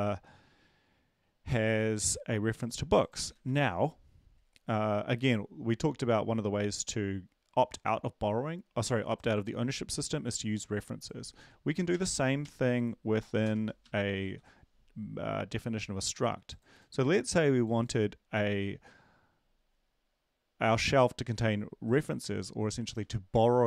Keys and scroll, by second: 3.3 ctrl+`, 12.4 Left, 12.4 Right, 12.4 Down, 14.2 Right, 14.2 End, 14.2 &.